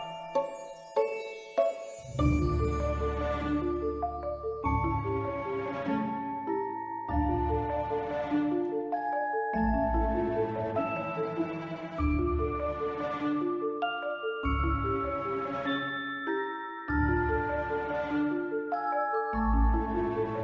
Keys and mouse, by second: 0.1 g, 0.3 x, 2.4 click, 2.7 Tab, 3.1 ctrl+r, 3.8 Escape, 4.6 ctrl+b, 5.9 click, 7.8 click, 7.8 1, 8.0 b, 9.5-11.2 drag, 11.5 Tab, 12.0 click, 13.5 s, 14.4 click, 14.8-15.8 drag, 16.2-16.7 middle drag, 16.8 middle drag, 17.5-17.9 shift+middle drag, 18.3 click, 19.6 x.